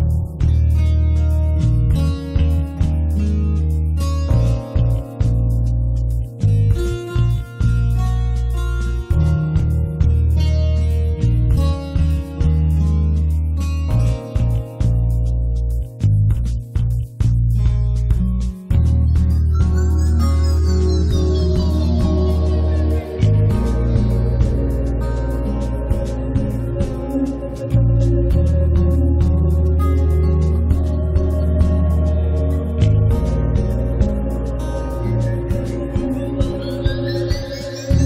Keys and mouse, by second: 0.3 middle click, 1.0 click, 1.4 click, 2.3-3.9 middle drag, 2.5-4.5 drag, 5.1 click, 5.4-6.9 middle drag, 6.9-9.4 drag, 7.9 middle click, 9.6 middle click, 9.7 click, 10.3 middle click, 10.3-11.7 drag, 11.6 middle click, 11.8 click, 12.3 middle click, 12.6 click, 13.5 shift+f, 13.7 click, 14.5-19.6 drag, 19.6 middle click, 20.3 g, 20.4 f, 20.8-22.0 drag, 22.4 click, 22.7 f, 23.6-26.5 drag, 27.5-28.6 middle drag, 28.6 click, 29.4 middle click, 29.9 ctrl+s, 30.7 click, 30.7 alt+F3, 31.5 middle click, 32.2 right click, 32.8 click, 33.5 click, 33.8 click, 34.0 middle click, 34.0 click, 34.3-35.4 middle drag, 35.1 f, 35.4 click, 35.9 click, 36.7 shift+f, 37.3 click, 37.4 f.